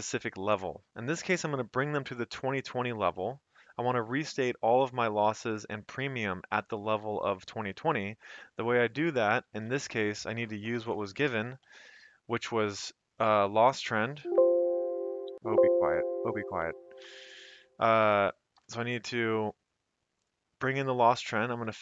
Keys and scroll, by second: 9.8 typing, 11.4 typing, 13.8 1, 14.2 shift+Return, 15.3 Escape, 16.1 Escape, 17.3 Right, 18.5 typing, 21.6 F4.